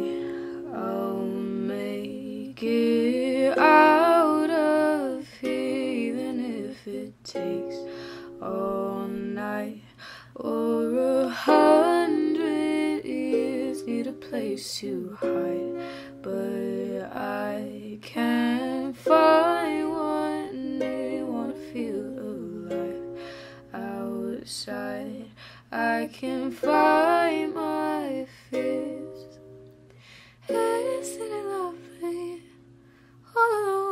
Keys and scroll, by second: 12.5 p, 26.8 ctrl+shift+d, 27.4 Delete, 31.1 F9.